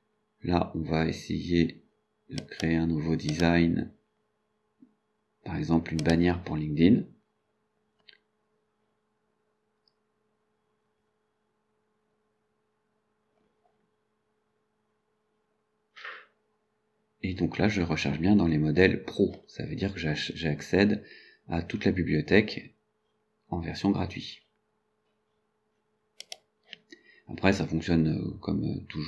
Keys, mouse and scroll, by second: 2.4 click, 3.4 click, 6.1 click, 15.3-15.8 scroll down 2, 20.2 scroll down 1, 20.8 scroll down 1, 21.8-22.1 scroll down 1, 23.1-23.4 scroll down 1, 24.5 scroll down 2, 25.3-25.6 scroll down 2, 26.3 click.